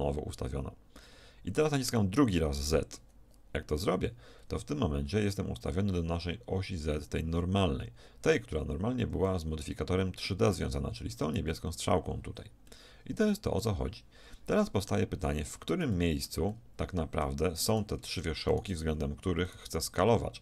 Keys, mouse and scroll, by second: 11.7 z, 12.8-14.6 middle drag, 16.0-19.8 shift+middle drag, 18.9 z, 20.3 click.